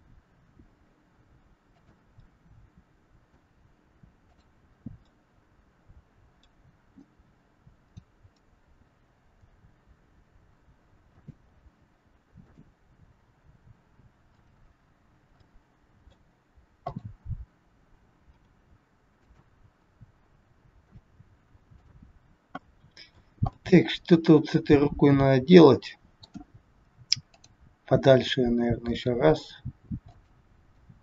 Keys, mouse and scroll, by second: 0.2 r, 2.2 middle click, 4.2 click, 5.0 middle click, 7.8 click, 9.2 g, 12.5 click, 13.1 g, 15.3 middle click, 16.7 click, 18.3 r, 19.7 r, 21.7 click, 22.6 middle click, 23.5 middle click, 27.3 click, 28.9 g, 30.7 middle click.